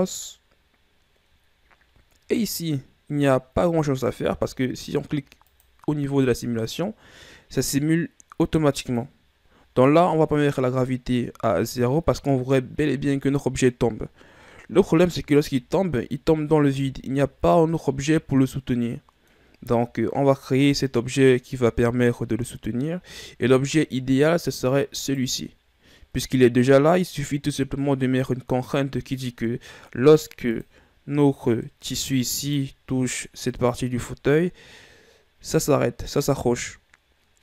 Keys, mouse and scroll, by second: 0.2 click, 4.7-6.1 shift+scroll down 4, 6.1 click, 9.4 click, 10.4-11.0 scroll down 1, 12.1-12.9 scroll down 7, 15.1-15.7 scroll down 1, 15.7-16.5 shift+scroll down 7, 16.5-17.6 scroll down 5, 17.6-18.2 shift+scroll up 8, 19.0-20.4 middle drag, 20.4-21.6 shift+scroll up 3, 21.6-23.5 scroll up 1, 23.8-24.3 shift+scroll up 3, 24.3-25.6 middle drag, 25.6 right click, 28.9-31.1 middle drag, 31.1 click, 32.2-33.0 middle drag, 33.0 right click, 34.1 right click.